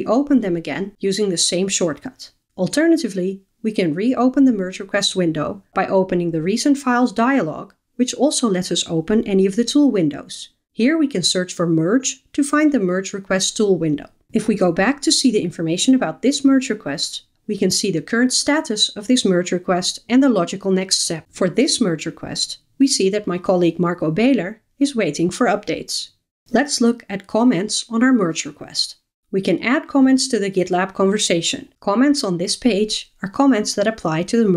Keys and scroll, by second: 2.4 shift+super+F12, 5.0 super+e, 13.6 Left.